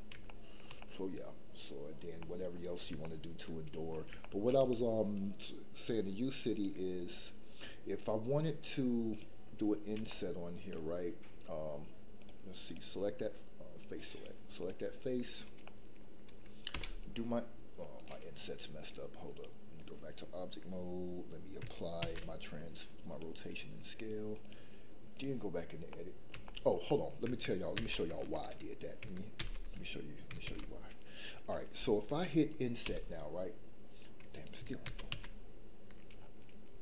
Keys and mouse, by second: 0.3 shift+middle drag, 0.8-1.7 middle drag, 2.2 middle click, 3.0 shift+middle click, 4.2 shift+middle drag, 5.9 click, 9.1 click, 10.0 shift+middle click, 15.6 middle click, 16.7 i, 19.3 click, 22.0 ctrl+a, 24.4 click, 25.9 middle click, 26.4 shift+middle click, 26.9 middle click, 27.7 ctrl+z, 29.4 ctrl+z, 30.4 ctrl+z, 32.8 i, 34.8 ctrl+z, 35.1 ctrl+z.